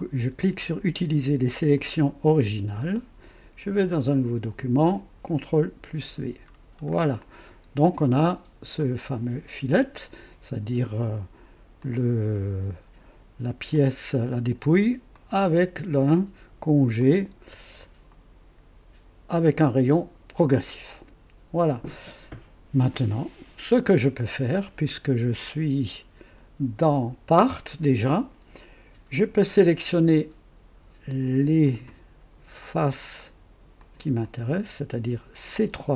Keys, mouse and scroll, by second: 1.7 click, 4.0 click, 5.5 ctrl+v, 6.5-6.8 ctrl+scroll down 1, 7.2-8.5 drag, 8.8-10.3 drag, 11.8 click, 13.7-14.7 drag, 15.1 click, 16.1 right click, 17.0 click, 20.4 scroll down 1, 20.9 right click, 22.9 click, 24.0 right click, 24.6-26.6 drag, 31.6 click, 33.8 ctrl+click, 34.2 ctrl+click, 35.4 ctrl+click.